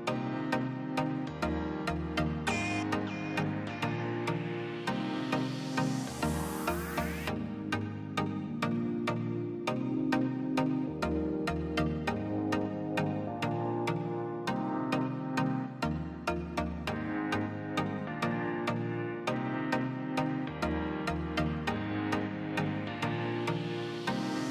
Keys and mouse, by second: 2.8 r, 7.0-8.3 right drag, 8.4-9.0 middle drag, 9.0 Tab, 9.8-12.8 middle drag, 12.8 click, 13.5-14.3 middle drag, 14.5-18.0 middle drag, 18.8-24.5 middle drag.